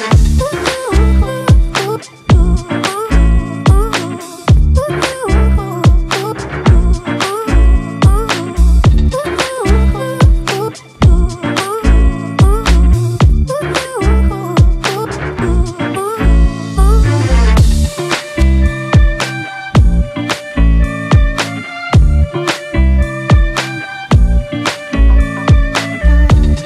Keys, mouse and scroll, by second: 1.5 double click, 2.2 typing, 2.6 double click, 7.1 click, 9.5 double click.